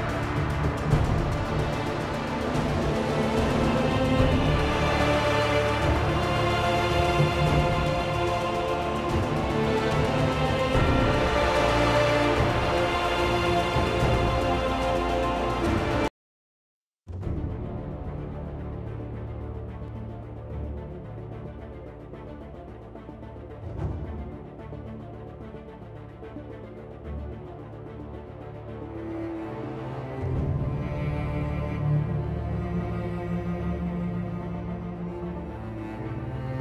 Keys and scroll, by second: 31.6 End.